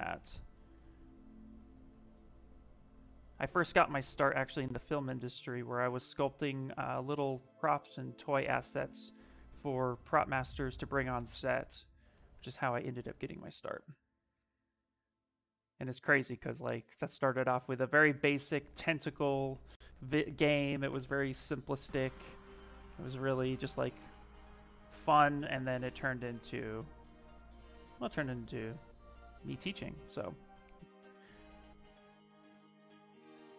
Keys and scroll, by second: 15.5 s, 16.6 s.